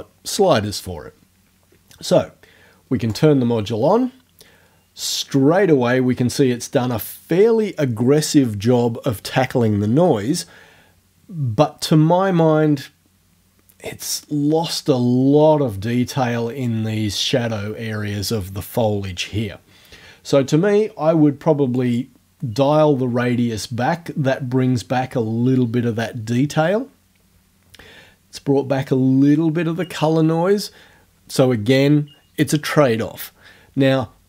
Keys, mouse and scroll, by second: 3.1 click, 21.8 click.